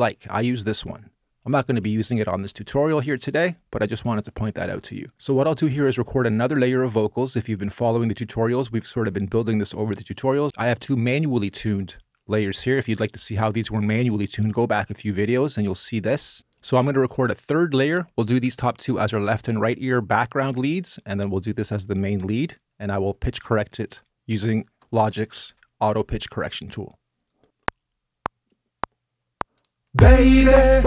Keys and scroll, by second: 27.5 r.